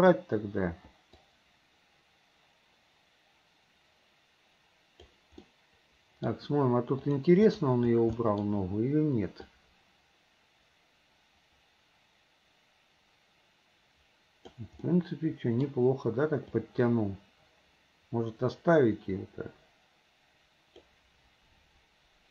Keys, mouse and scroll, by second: 0.2 Delete, 1.3-5.2 drag, 5.5-6.3 middle drag, 7.0 click, 7.5 click, 8.2-8.5 middle drag, 9.6-14.6 drag, 14.9-15.7 middle drag, 16.6-20.9 drag.